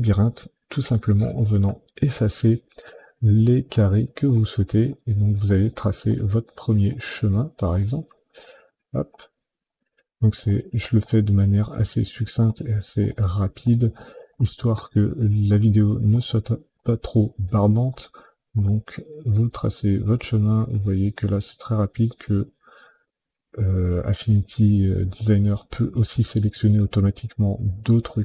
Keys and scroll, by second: 1.8 Delete, 2.9 Delete, 3.7 Delete, 4.3 Delete, 4.9 Delete, 5.5 Delete, 6.2 Delete, 6.9 Delete, 7.8 Delete, 8.5 Delete, 9.0 Delete, 10.4 Delete, 11.0 Delete, 12.3 Delete, 13.0 Delete, 14.3 Delete, 15.4 Delete, 16.1 Delete, 16.8 Delete, 17.9 Delete, 18.9 Delete, 19.8 Delete, 20.5 Delete, 21.8 Delete, 22.9 Delete, 26.6 Delete.